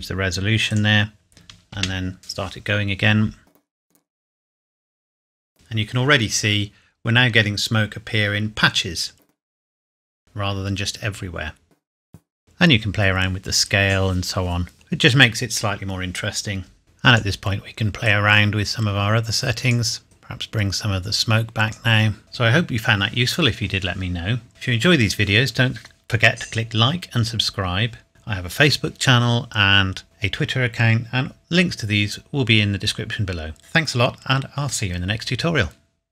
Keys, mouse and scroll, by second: 0.7 click, 1.8 space, 16.8 click, 22.6 scroll down 1, 27.0 click, 27.8 scroll down 1, 28.5 middle click, 29.6 scroll up 1, 30.9 scroll down 1.